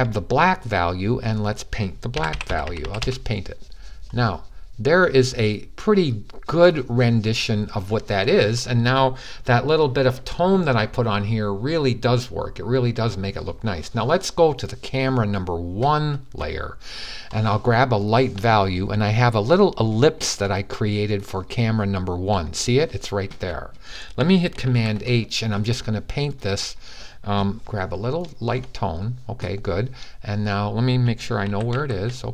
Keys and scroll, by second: 1.7-3.2 typing, 24.5 super+h, 27.4 super+h, 30.7 super+h, 31.3 super+h, 31.6 super+h.